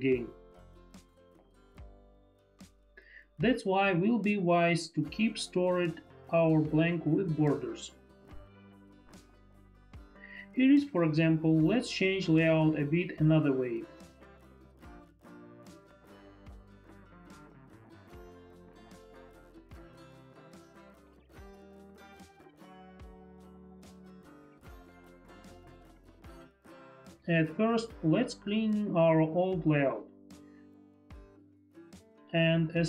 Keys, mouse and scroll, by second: 10.2 F5, 10.5 click, 11.7 F5, 11.7 click, 12.5 click, 13.3 click, 14.1 click, 15.4 Return, 15.4 click, 16.0 Return, 16.0 click, 16.7 F5, 16.9 click, 19.1 click, 19.3 click, 19.9 click, 20.9 Return, 21.7 click, 24.0 shift+click, 29.1 click, 30.0 click, 30.5 Delete, 32.1 click, 32.8 Delete.